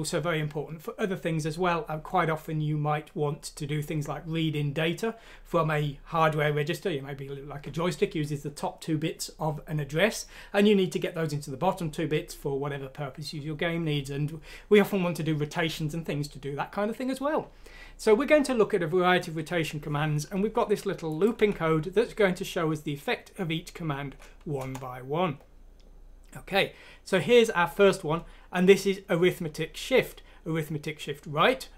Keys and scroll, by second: 21.4 F6, 24.6 Return.